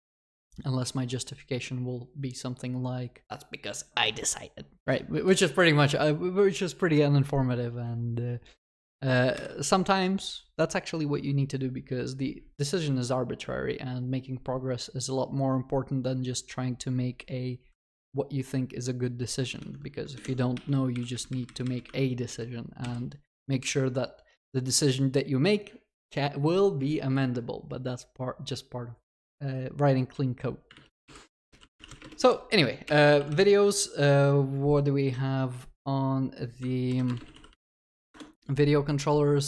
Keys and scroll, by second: 38.1 ctrl+shift+n.